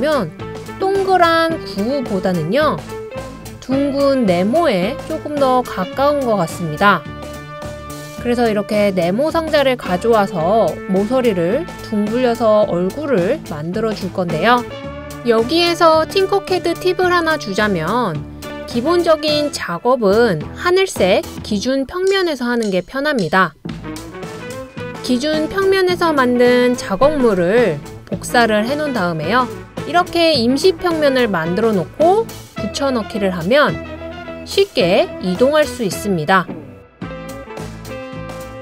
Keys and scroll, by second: 23.9 super+c, 33.0 super+v.